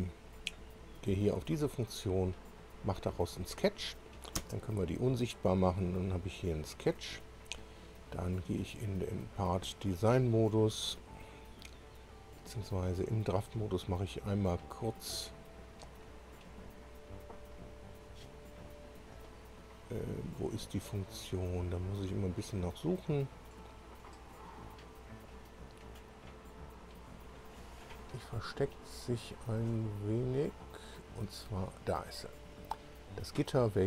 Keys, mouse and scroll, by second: 1.9 click, 5.0 space, 5.2-6.0 scroll down 4, 6.4 click, 8.7 click, 9.9 click, 13.4 click, 17.2 click, 32.4 click.